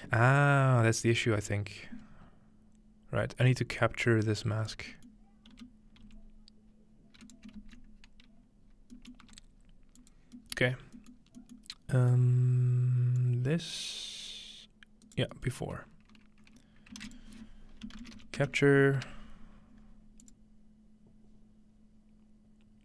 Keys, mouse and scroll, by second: 0.0-0.5 scroll up 2, 1.1-2.0 scroll down 2, 2.0 scroll up 2, 4.0-4.9 drag, 5.5-6.0 typing, 7.2 right click, 7.6 typing, 8.6-9.1 scroll down 2, 9.1-10.1 middle drag, 9.2 g, 10.0 click, 10.1-10.7 scroll down 1, 10.7 scroll up 1, 10.8 scroll down 1, 10.9 scroll up 1, 10.9-11.9 scroll down 1, 11.9 scroll up 1, 12.2-15.0 middle drag, 13.2-15.3 drag, 15.0 right click, 15.7-16.4 scroll up 1, 16.4-17.0 scroll up 1, 17.0-19.5 typing, 17.2-18.6 shift+drag, 20.2-22.1 drag.